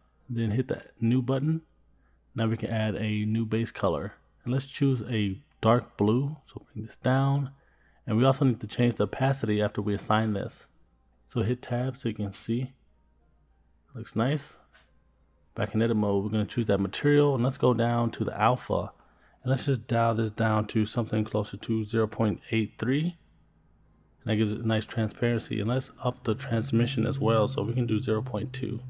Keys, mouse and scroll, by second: 1.7 click, 3.7 click, 9.2 click, 10.9 click, 11.8-12.3 scroll down 2, 12.3-13.8 middle drag, 14.5-15.0 scroll up 2, 17.2-18.6 scroll down 7, 19.0 scroll down 1, 20.9-23.0 drag, 26.1-27.4 drag, 28.0 middle click.